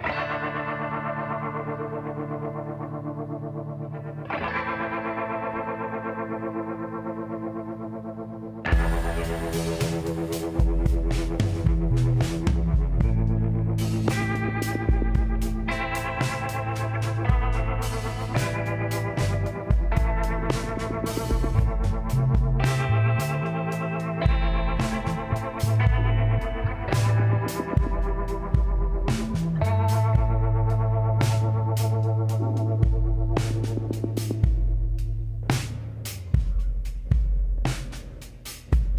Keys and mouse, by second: 3.3-5.2 drag, 5.3 s, 8.5-10.2 drag, 8.7 b, 10.6 b, 12.3 s, 16.1-18.1 drag, 16.5 b, 18.7 b, 19.8 b, 21.1 b, 22.1 b, 23.4 b, 24.8 s, 28.8-30.8 drag, 29.1 b, 30.4 b, 31.2 b, 32.2 b, 33.6 b, 34.4 b, 36.0 s.